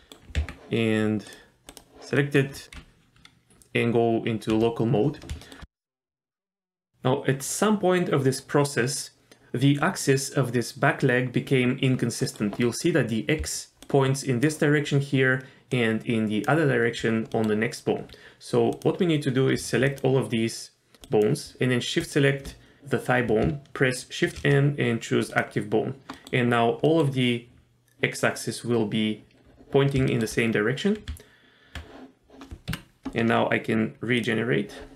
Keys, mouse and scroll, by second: 0.4 Tab, 1.3 click, 1.7 click, 2.2 middle click, 5.4 shift+middle click, 6.1 Tab, 12.2 middle click, 12.6-13.4 scroll up 1, 13.4 d, 13.8 click, 14.4-15.7 d, 15.7 click, 16.5-16.9 d, 17.3 middle click, 17.9-18.5 scroll down 1, 18.7 click, 19.9 shift+click, 21.0 shift+click, 22.0 shift+click, 24.2 shift+n, 26.1 middle click, 26.8 middle click, 30.1 shift+middle click, 30.4-31.1 scroll up 1, 31.1 Tab, 31.1-31.5 scroll up 1, 34.2 click.